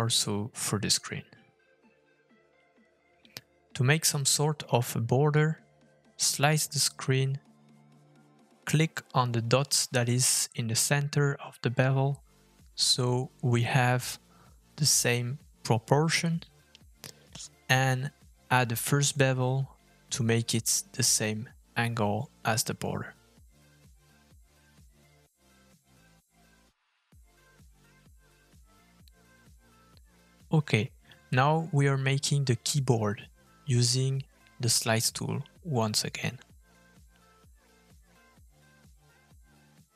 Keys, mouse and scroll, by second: 3.7 click, 5.0 f, 7.8 middle click, 9.8-10.4 scroll down 2, 10.4 middle click, 10.6 f, 27.2 middle click, 29.6 middle click, 30.4 click, 30.6 middle click, 31.9 scroll down 1, 32.1 shift+middle click, 32.6 click, 33.6 f, 36.2 middle click.